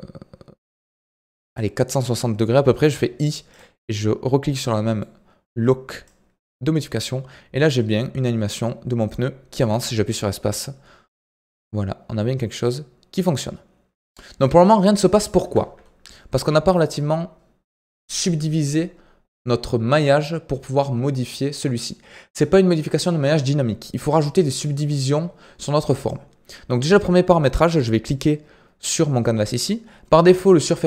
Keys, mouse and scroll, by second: 4.5-5.1 middle drag, 5.1 scroll up 2, 6.0-9.0 drag, 9.6 space, 15.4 space, 16.1-24.1 shift+middle drag, 24.1-30.7 drag.